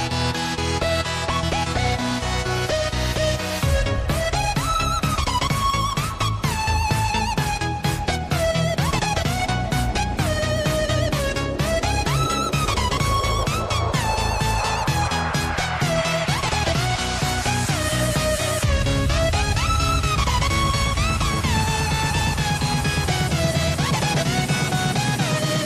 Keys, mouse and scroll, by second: 6.9 Tab, 7.7 click, 8.7 Tab, 9.1 click, 10.5 click, 11.1 click, 12.0 shift+click, 13.0 shift+click, 14.1 click, 15.4 shift+click, 16.3 click, 17.4 shift+click, 17.8 shift+click, 18.4 shift+click, 19.0 shift+click, 20.2 click, 22.2-24.2 scroll up 1, 24.2 click, 25.4 shift+click.